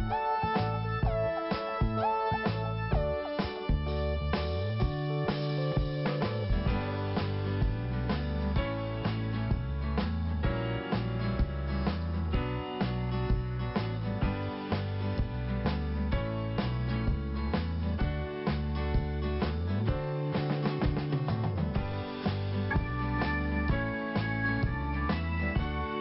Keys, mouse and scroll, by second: 0.0 click, 1.4 click, 2.7 click, 2.8 click, 3.3 click, 4.6 click, 6.6 click, 7.1 click, 8.5-9.1 scroll down 1, 9.4 scroll up 1, 10.0 click, 11.0 click, 12.3 click, 13.4 click, 15.0 scroll down 1, 16.1 scroll up 1, 16.6 click, 17.8 click, 19.4 scroll down 2, 20.7 scroll up 1, 20.7 scroll down 1, 20.9 scroll up 2, 21.2 click, 22.4 click, 25.8 click.